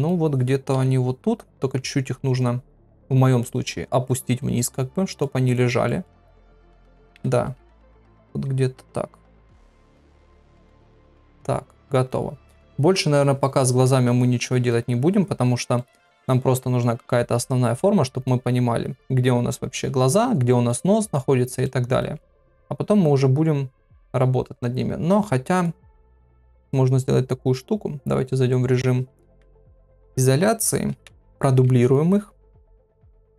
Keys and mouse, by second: 0.7 KP_3, 2.7 r, 4.7 middle click, 5.8 middle click, 7.1 KP_7, 8.4 g, 9.9 click, 10.1 middle click, 11.2 middle click, 14.7 middle click, 15.7 middle click, 17.7 middle click, 20.7 middle click, 21.6 middle click, 26.6 KP_Divide, 30.3 Tab, 30.9 Tab, 31.8 shift+d.